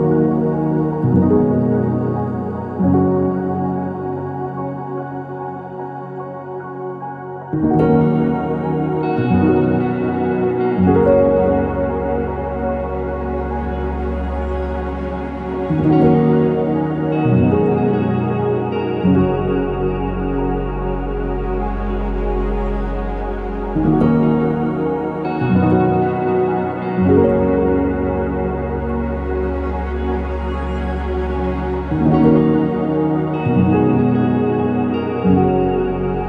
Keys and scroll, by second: 0.0-3.2 typing, 9.7 typing, 9.7 Return, 11.2 ctrl+z, 12.0 Escape, 12.2 Escape, 16.8-17.7 typing, 19.2 BackSpace, 19.6 BackSpace, 21.3 ctrl+s, 22.8 ctrl+c, 28.7 ctrl+c, 28.7 ctrl+v.